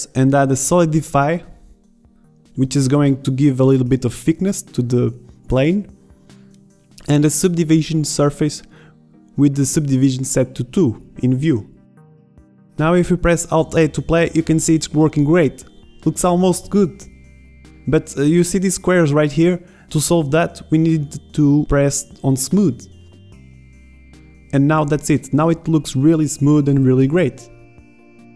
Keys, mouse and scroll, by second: 6.4-10.6 middle drag, 11.1 middle click, 13.5 alt+a, 16.9 alt+a, 17.5-18.2 middle drag, 18.4-19.7 middle drag, 26.2-27.2 drag, 27.2 shift+Left.